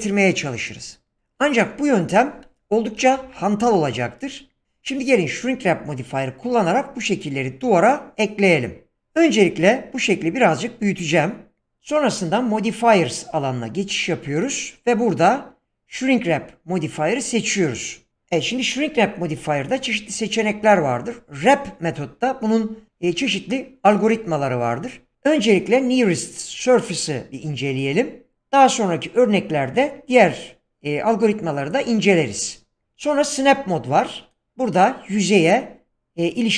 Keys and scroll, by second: 3.2 ctrl+z, 9.4 s.